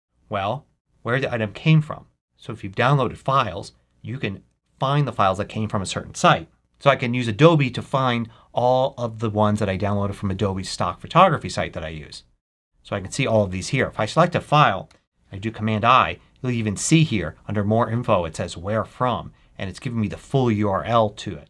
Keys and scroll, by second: 14.8 super+i.